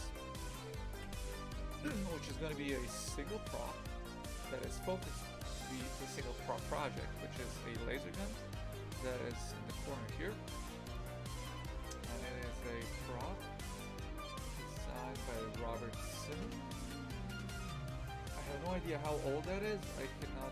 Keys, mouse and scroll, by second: 0.4 ctrl+i, 1.0 Delete.